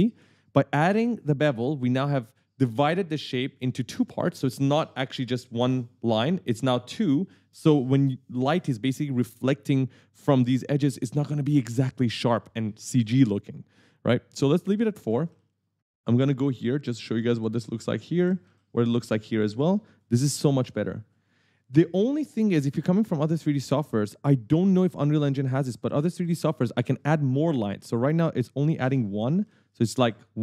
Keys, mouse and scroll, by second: 14.6 click, 15.1 click, 15.4 right click, 15.9-16.3 scroll up 1, 20.8 click, 23.7 click, 24.1 click, 24.7 s, 24.8 right click, 28.3 right click.